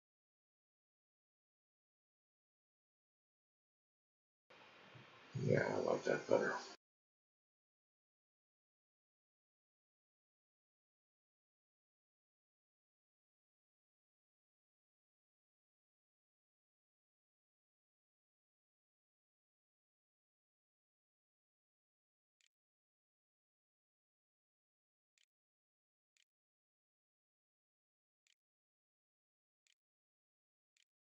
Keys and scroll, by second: 21.1-31.0 typing, 28.0 Tab.